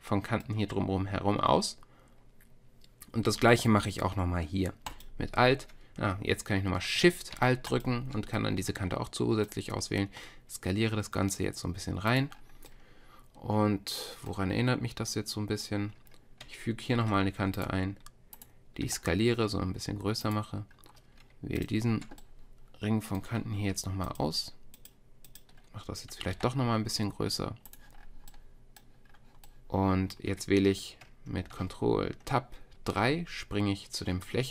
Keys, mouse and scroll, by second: 6.5-7.7 drag, 10.0 s, 17.0 ctrl+r, 18.8 s, 21.6-23.3 drag, 26.4 s, 32.3 ctrl+Tab.